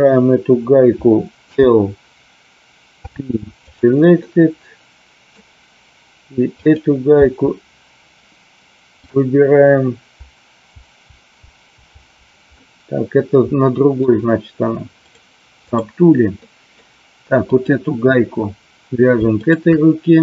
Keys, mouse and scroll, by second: 1.4 l, 2.9 p, 4.2-5.3 middle drag, 6.5 click, 7.1 p, 8.9 click, 10.7 l, 11.3 l, 11.8 l, 12.5-13.9 middle drag, 15.2 click, 16.4 middle click, 17.4 click, 19.4 shift+click.